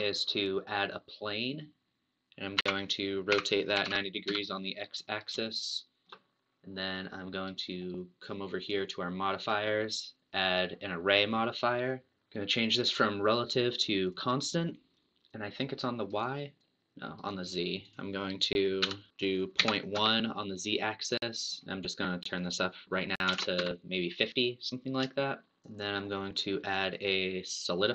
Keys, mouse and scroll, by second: 2.6 r, 5.0-5.5 scroll up 2, 5.5-7.7 shift+middle drag, 7.7 scroll down 2, 8.6 click, 10.5-12.1 drag, 12.1-13.2 shift+middle drag, 13.2 click, 14.0 click, 15.3 click, 16.6 click, 18.0-19.0 drag, 21.2-22.2 middle drag, 22.2-25.2 drag, 25.2 shift+middle click, 25.5 click.